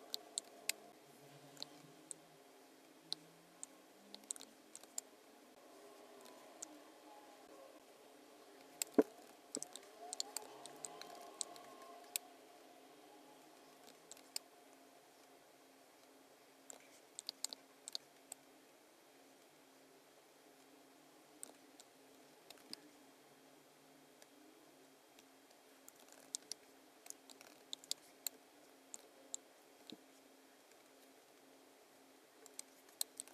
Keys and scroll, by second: 0.5 space, 4.8 space, 8.6 space, 10.2 space, 11.0 super+=, 11.5 space, 14.2 space, 17.3 space, 17.9 space, 22.1 space, 22.7 v, 25.2 v, 26.1 super+-, 26.5 space, 27.4 super+=, 27.9 space, 29.0 super+f, 29.9 v, 32.6 space, 33.2 super+-.